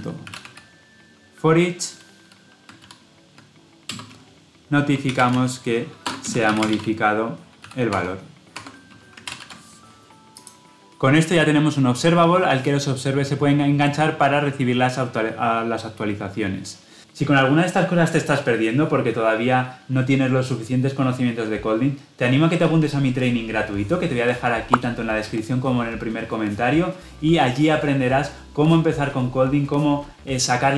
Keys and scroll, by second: 3.8 Return, 9.1 Escape, 9.2 ctrl+alt+l, 10.4 ctrl+alt+o.